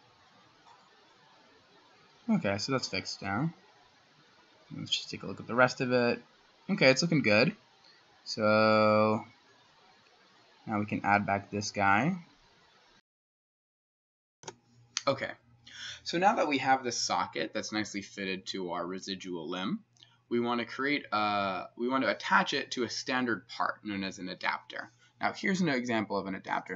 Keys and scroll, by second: 14.4 \.